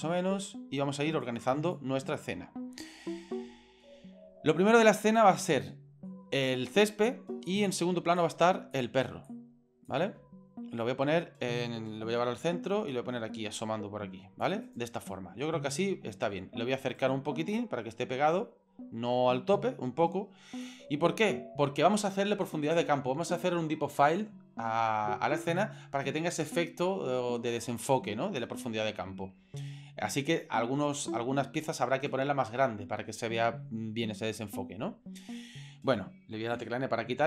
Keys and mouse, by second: 0.2 middle click, 1.2 click, 4.7-6.1 middle drag, 7.5 right click, 8.2 click, 9.3 click, 12.0 alt+g, 12.9-14.4 drag, 14.7 right click, 15.1-16.3 middle drag, 16.8 right click, 17.5-20.6 drag, 21.1 middle click, 36.6 n.